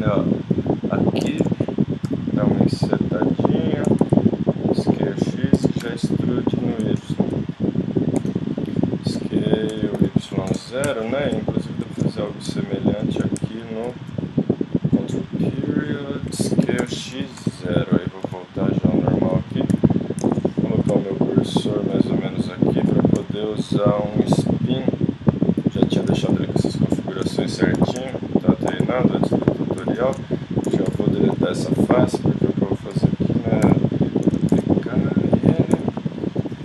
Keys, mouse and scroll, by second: 1.3 z, 2.0 i, 3.8 s, 4.8 click, 5.6 e, 7.0 middle click, 9.7 s, 11.1 middle click, 12.0 middle click, 12.8 middle click, 13.8 ctrl+., 15.8-17.5 middle drag, 16.6 s, 18.3 ,, 19.1-21.1 middle drag, 19.7 KP_3, 21.6 middle click, 21.9 click, 23.2 click, 23.2 t, 23.5 middle click, 24.1-26.0 drag, 27.8 e, 30.0 middle click, 30.1 middle click, 30.7 x, 31.3 middle click, 31.8 middle click, 32.9 l, 33.3 middle click, 33.6 KP_3, 34.5 shift+d, 35.7 r.